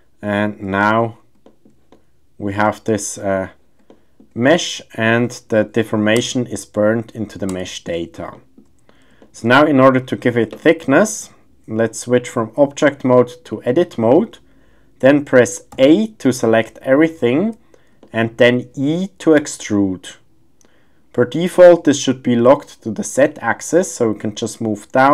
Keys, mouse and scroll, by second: 0.1 shift+scroll, 0.2-0.5 shift+middle drag, 1.4 shift+middle drag, 1.9 middle click, 3.9-4.2 shift+middle drag, 6.3 Tab, 7.5 Tab, 8.3 shift+middle drag, 9.2 shift+middle drag, 12.3-13.7 drag, 15.8 a, 17.0-17.5 shift+scroll, 18.0 shift+click, 18.5-18.8 shift+scroll, 19.6 e.